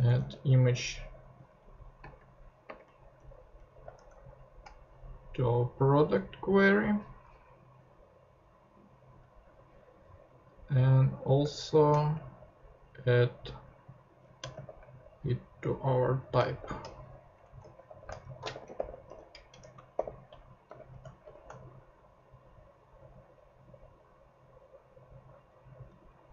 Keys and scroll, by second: 0.0 Return, 1.6 Left, 2.0 space, 2.8 Up, 3.2 Tab, 3.5 Up, 3.9 shift+Tab, 12.0 shift+super+c, 13.0 super+c, 14.4 Return, 16.6 shift+;, 17.4 shift+Down, 17.6-20.7 typing, 21.2 shift+super+p.